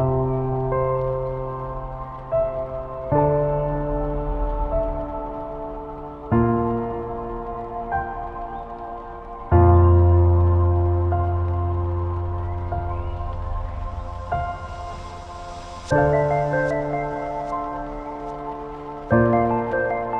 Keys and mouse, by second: 0.5 shift+middle drag, 2.3 shift+middle click, 2.9 Tab, 2.9-5.8 typing, 5.1 alt+click, 6.3 shift+middle click, 7.4 shift+middle click, 8.0 middle click, 11.4 alt+shift+click, 12.2 middle click, 13.0 shift+middle click, 14.7 ctrl+b.